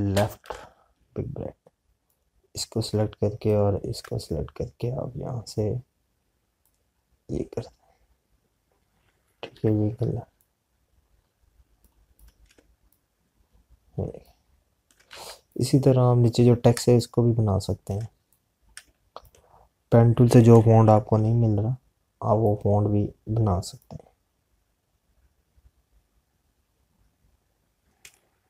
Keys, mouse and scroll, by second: 1.6 [, 2.6 click, 10.9 click, 20.4 space, 27.6 click.